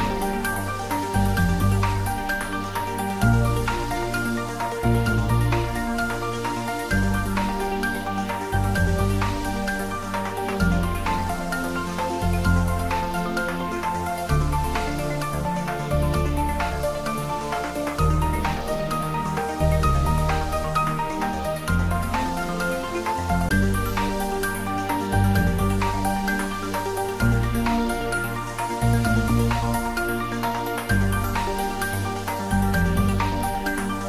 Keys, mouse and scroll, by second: 1.2-2.5 scroll up 1, 2.5 scroll down 1, 3.0-5.4 middle drag, 5.4 Tab, 5.8 scroll up 1, 7.9 alt+click, 8.8-10.6 middle drag, 10.6 click, 11.2 scroll down 1, 13.0-13.6 scroll up 1, 13.7 shift+z, 14.2-16.8 middle drag, 16.8 click, 17.7-18.4 scroll up 1, 18.7 shift+d, 19.7 r, 20.8 typing, 21.6 click, 22.7 s, 26.6 click, 26.9-27.9 typing, 28.6 click, 29.3 g, 32.5 click, 33.0 a, 33.8 click.